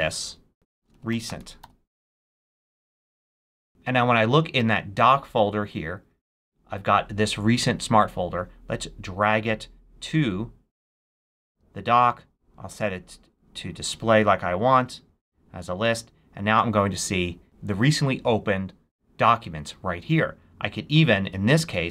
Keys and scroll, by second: 0.4-2.0 typing.